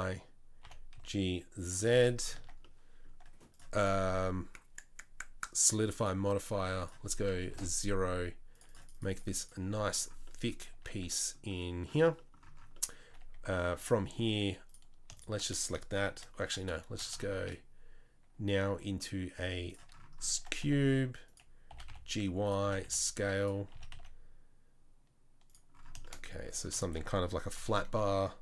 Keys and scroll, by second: 0.6 g, 2.4 Tab, 10.7 Tab, 11.0 Tab, 13.1 Tab, 13.3 Tab, 13.7 Tab, 16.4 Tab, 17.3 shift+a, 20.3 Tab, 20.6 s, 21.7 g, 22.6 s, 23.7 s, 27.5 KP_3.